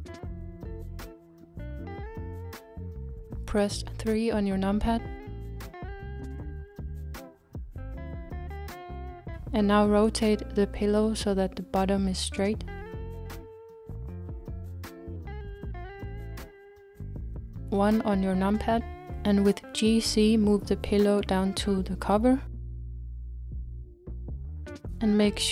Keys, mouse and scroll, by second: 0.6-1.1 scroll down 2, 1.1 scroll down 1, 1.3-3.1 middle drag, 3.1-3.8 scroll up 2, 3.8-4.9 scroll up 3, 4.9-5.3 scroll up 1, 5.3 click, 6.7 KP_3, 7.9 scroll up 2, 10.3 r, 17.9 KP_1, 19.4-20.1 scroll up 3.